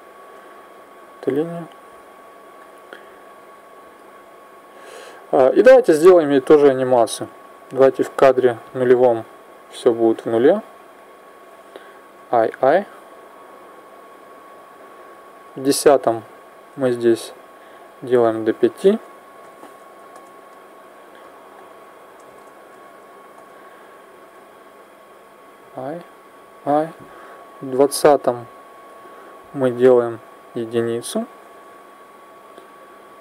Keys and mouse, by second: 0.5 click, 1.6 s, 3.1 click, 5.7 middle click, 6.5-8.4 drag, 9.8-11.9 drag, 11.9 i, 12.2 i, 13.7 click, 16.9-19.9 drag, 21.3 click, 25.3 i, 26.1 i, 27.2 click, 29.8-31.6 drag, 31.9 i, 32.4 i.